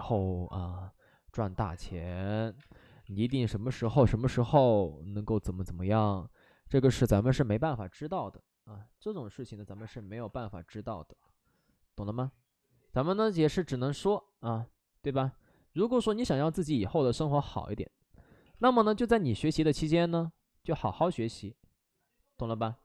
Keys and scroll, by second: 2.6-4.4 typing, 2.8 ctrl+z, 3.0 ctrl+z, 6.6 ctrl+z, 6.8 ctrl+z, 7.0 space, 16.1 ctrl+z, 18.2 ctrl+z, 18.2 space, 18.5 space, 22.6 space.